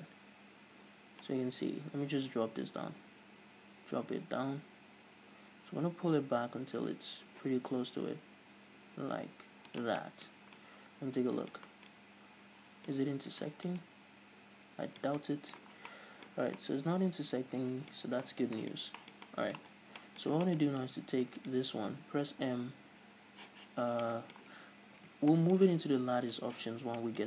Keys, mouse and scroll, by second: 10.0 shift+click, 10.2-16.5 middle drag, 10.5 scroll up 2, 11.9 scroll down 1, 13.1-13.6 scroll up 1, 15.9 scroll down 1, 16.5 scroll up 2, 16.6-21.6 middle drag, 16.6 scroll down 1, 18.2 scroll up 1, 20.0 scroll down 2, 21.4 Tab, 21.6 right click, 22.5 m, 24.3-27.2 middle drag, 25.2 alt+h, 27.0 scroll down 2.